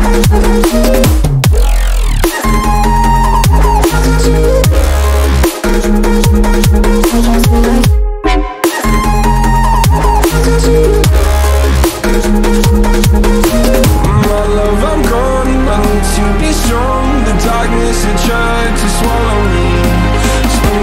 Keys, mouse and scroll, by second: 3.0-11.1 ctrl+middle drag, 15.2-20.8 drag.